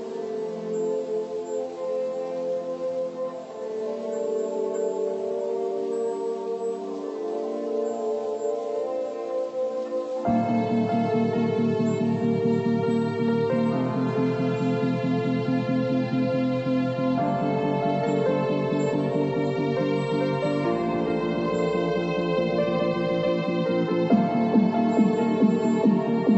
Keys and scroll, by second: 7.7 Left, 7.8 Up.